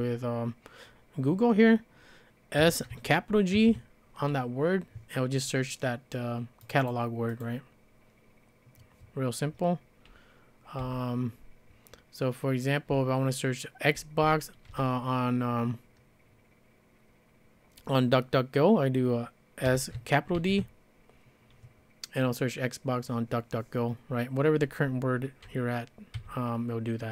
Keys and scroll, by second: 2.6-3.6 typing, 10.8 typing, 12.9-14.7 typing, 19.7 s, 20.4 shift+d, 26.2 d.